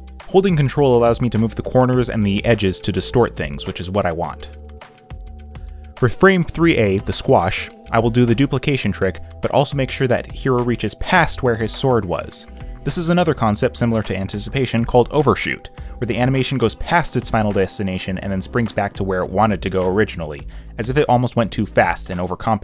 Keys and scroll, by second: 7.4 ctrl+c, 7.8 ctrl+v, 11.5 ctrl+t, 13.9 Return, 20.2 ctrl+c, 20.4 ctrl+v.